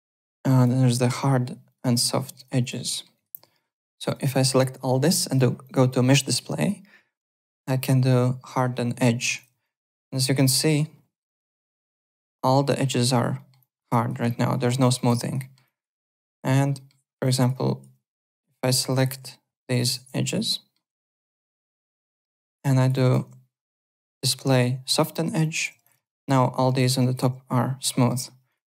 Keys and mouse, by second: 0.5 click, 1.6 click, 2.0 alt+click, 2.2 `, 2.3 click, 2.6 alt+click, 2.9 alt+middle click, 3.1 alt+right click, 3.3 alt+w, 3.6 3, 3.9 click, 5.3 click, 8.4 click, 9.0 alt+click, 9.3 click, 9.6 alt+click, 10.5 click, 11.0 F2, 11.4 alt+click, 11.8 F4, 12.2 alt+click, 13.3 alt+middle click, 13.6 alt+click, 13.9 alt+right click, 14.2 alt+click, 14.9 alt+click, 15.2 alt+right click, 15.3 alt+middle click, 15.6 alt+click, 15.7-16.7 typing, 16.7 alt+middle click, 17.2 alt+click, 18.2 F4, 18.5 click, 18.9 alt+click, 19.6 shift+click, 20.0 alt+click, 20.5 alt+middle click, 21.6 F4, 22.0 alt+click, 22.2 alt+right click, 22.6 alt+click, 23.7 click, 24.9 click, 25.4 alt+click, 25.7 `, 25.8 click, 26.0 alt+click, 26.7 alt+click, 28.0 alt+middle click, 28.4 click.